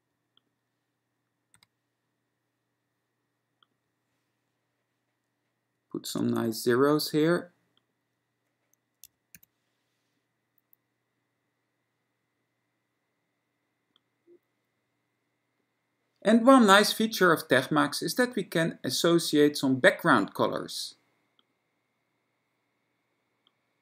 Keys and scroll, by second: 1.7 ., 6.2 F6, 6.6 0, 9.1 F6, 9.6 0.